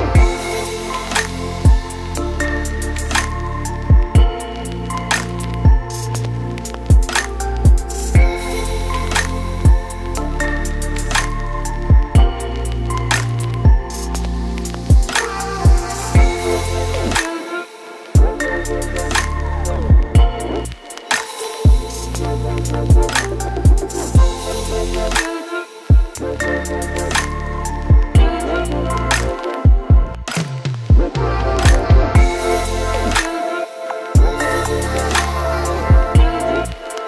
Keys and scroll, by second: 7.9 ctrl+a, 10.6 ctrl+d, 10.7 ctrl+space, 11.7 Down, 11.7-14.5 typing, 16.9 ctrl+t, 21.1 shift+space, 21.5 shift+space, 21.9-22.5 shift+space, 23.7 space, 27.1 ctrl+t, 32.7 ctrl+a, 33.2-34.7 typing.